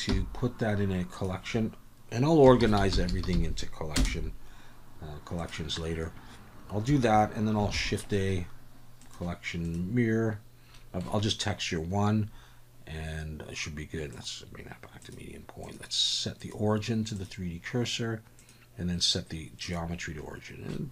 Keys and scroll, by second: 0.1 m, 3.1 r, 7.7 shift+a.